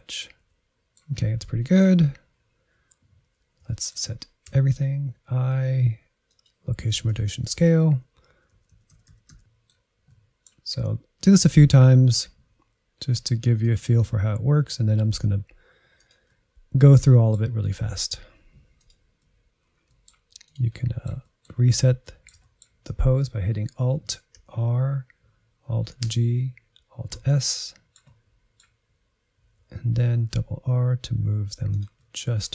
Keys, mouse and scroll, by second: 0.2 middle click, 0.3-1.2 scroll down 2, 0.5 shift+middle click, 1.4 middle click, 2.3-3.2 scroll down 3, 3.2-3.6 scroll down 1, 3.6 shift+middle click, 4.6 a, 5.5 i, 7.0-8.4 drag, 8.4 Right, 8.6-9.7 Right, 9.8 middle click, 10.1-10.4 scroll up 3, 10.4 click, 10.6-11.8 shift+middle drag, 11.8 g, 12.8 r, 13.7 middle click, 14.4 r, 15.0 middle click, 15.4 g, 16.2 click, 16.3 middle click, 16.7 r, 17.8 middle click, 18.3 scroll up 1, 18.5 click, 18.7 g, 19.1 middle click, 19.3-19.9 scroll up 4, 19.9 middle click, 20.5 click, 20.7 middle click, 21.6-22.0 scroll down 1, 22.0-24.4 middle drag, 24.4 alt+r, 26.1 alt+g, 27.2 alt+s, 27.7-29.5 middle drag, 29.5 r, 32.0 middle click.